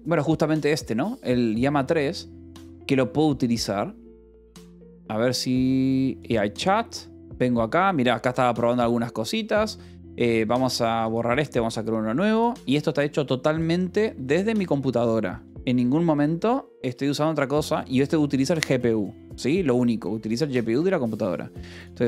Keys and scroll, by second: 16.9 ctrl+=.